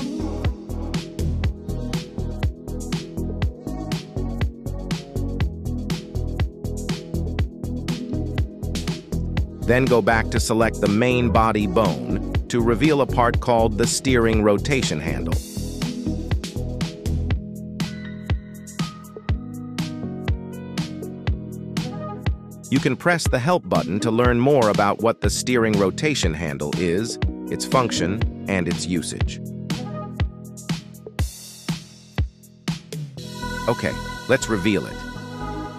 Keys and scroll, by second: 2.4 y, 3.1 Escape, 10.3 g, 11.0 Escape, 31.3 Escape.